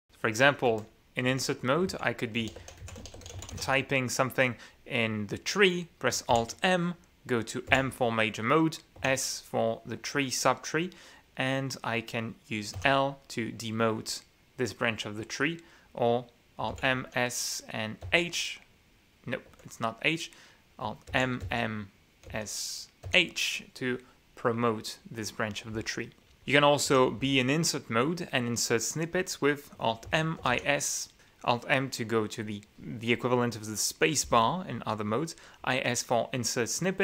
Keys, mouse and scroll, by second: 0.8 Escape, 1.3-4.7 typing, 6.9 alt+m, 8.3 m, 9.6 s, 13.4 l, 17.3 alt+m, 17.6 alt+s, 18.6 h, 20.1 Escape, 21.7 alt+m, 22.9 s, 23.6 h, 26.4 k, 26.9 i, 30.1 alt+m, 30.5 alt+i, 30.5 alt+s.